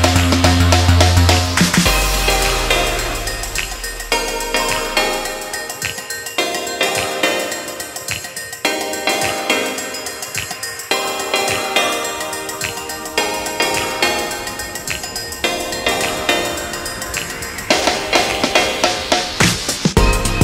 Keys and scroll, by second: 7.1 ctrl+g, 17.1 ctrl+t.